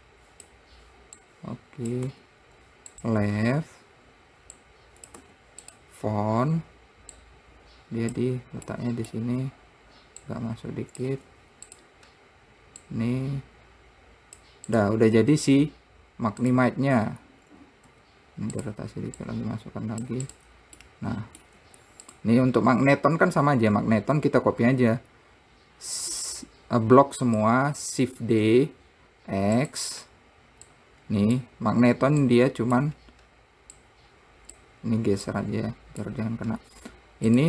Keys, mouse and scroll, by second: 0.3 click, 1.6 click, 2.4 `, 5.0 click, 5.6 `, 7.6 click, 9.1-10.7 middle drag, 10.7 click, 11.5 `, 13.3 click, 15.1 click, 15.5 scroll down 3, 16.8 click, 17.4-17.8 scroll up 1, 18.3 r, 19.6 click, 20.7 click, 21.2 middle click, 22.0 `, 22.9 scroll down 5, 26.6 click, 28.7 shift+d, 31.1 click, 32.7-35.8 drag, 37.2-37.4 scroll up 1.